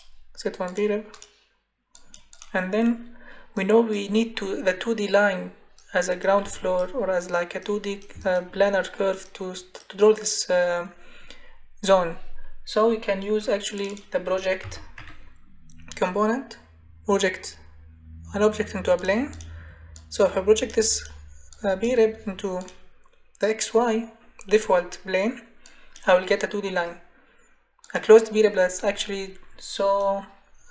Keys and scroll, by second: 14.1-15.5 typing.